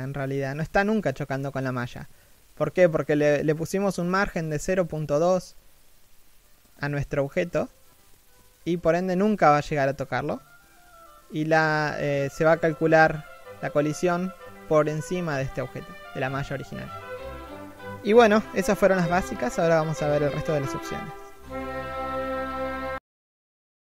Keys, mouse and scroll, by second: 3.4-3.8 scroll down 1, 3.8 middle click, 5.8 shift+middle click, 6.4 scroll up 1, 7.3 right click.